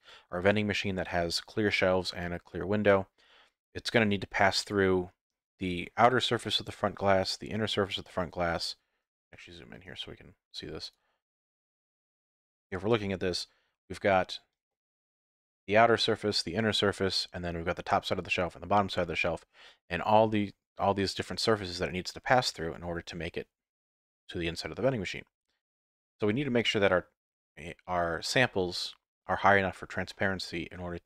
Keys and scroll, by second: 12.9 z.